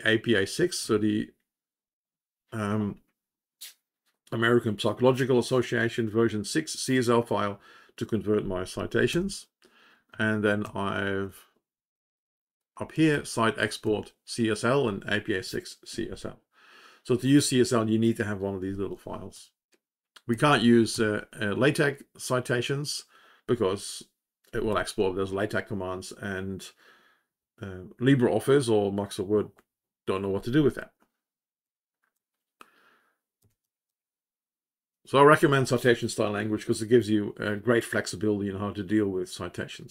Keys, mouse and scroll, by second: 0.7 Up.